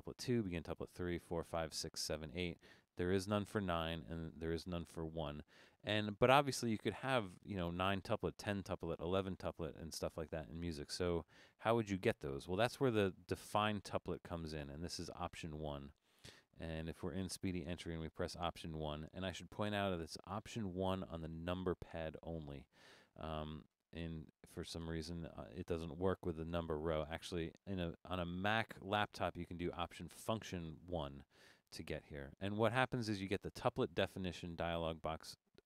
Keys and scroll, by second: 21.6 alt+1.